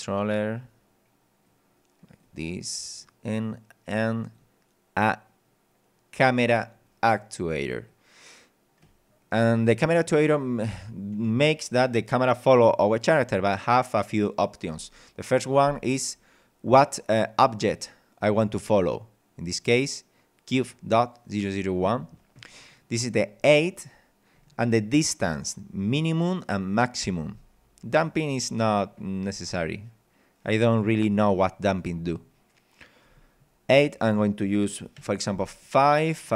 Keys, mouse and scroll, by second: 0.2 click, 1.4 click, 3.0 click, 4.2 click, 6.2 click, 7.9-9.0 drag, 18.7 click, 20.6 click, 33.7 click, 35.0 KP_5, 35.5 click, 36.2 click.